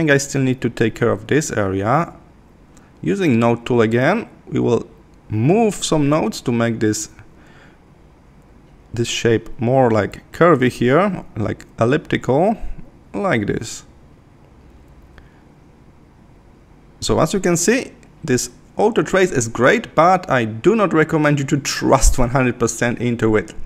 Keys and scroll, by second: 5.8 super+=, 8.3 Left, 14.1 super+-, 17.3 super+-.